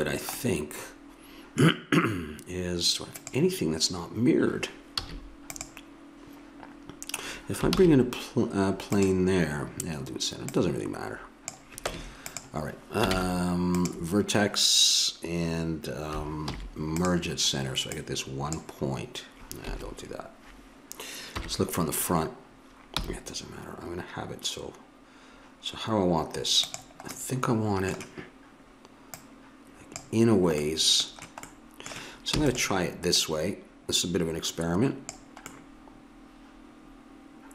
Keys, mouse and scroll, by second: 3.2-4.9 drag, 5.0 a, 5.5-7.7 drag, 7.7 shift+a, 10.5-12.4 drag, 11.8 Tab, 13.1 ctrl+Tab, 16.5 alt+m, 17.9-19.5 drag, 21.3 KP_1, 23.0 g, 29.1-30.6 drag, 30.6 middle click, 32.3 e, 33.2-35.0 drag, 35.5-37.4 middle drag.